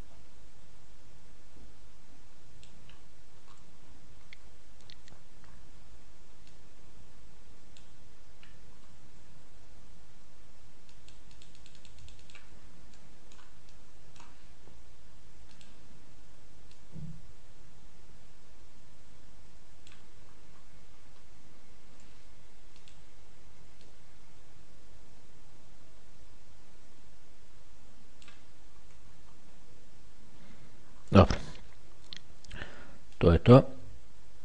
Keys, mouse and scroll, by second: 3.2-3.7 scroll down 1, 3.7-4.1 scroll up 1, 4.1-5.8 scroll down 1, 5.8-6.8 shift+scroll down 1, 6.8-8.6 drag, 9.0-10.2 scroll down 3, 11.2 click, 13.2 middle click, 15.8 click, 17.0-20.6 drag, 20.6-22.4 scroll down 3, 23.0 click, 24.1-28.8 drag, 28.8-29.7 scroll down 3, 29.7-30.2 shift+scroll down 1, 30.2-31.4 shift+scroll down 1, 31.4-32.9 ctrl+shift+scroll down 1, 33.5 click.